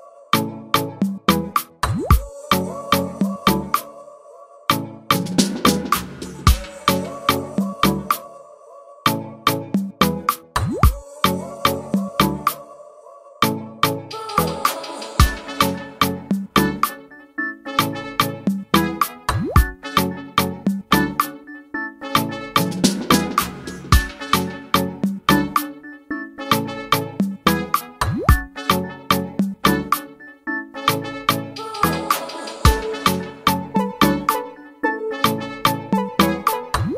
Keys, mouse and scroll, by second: 2.1 click, 5.0-5.6 scroll down 1, 5.8 click, 7.5 scroll down 1, 12.8-13.7 scroll down 1, 13.7 scroll down 1, 14.2 click, 14.6-15.1 scroll up 8, 15.5-16.6 drag, 19.0 click, 19.3 scroll down 2, 20.4-20.9 scroll up 1, 20.9 click, 21.1-22.1 scroll down 4, 21.4 click, 22.2 click, 23.6 click, 24.0 scroll up 2, 24.3 click, 24.6-25.8 drag, 25.8-27.0 scroll down 1, 27.0 click, 27.6 click, 27.7-28.3 scroll up 3, 28.3-30.7 drag, 30.7-31.0 scroll down 3, 31.2 click, 31.7-32.3 scroll up 3, 32.3-34.1 drag, 34.4 click, 34.7 click, 35.2 click, 35.9 click.